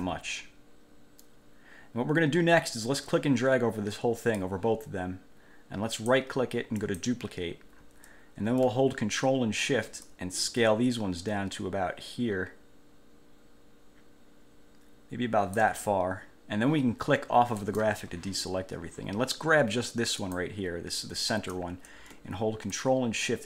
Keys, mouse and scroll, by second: 3.2-4.8 drag, 6.2 click, 7.0 click, 10.2-16.0 ctrl+shift+drag, 17.8 click, 20.4 click, 22.9-23.4 ctrl+shift+drag.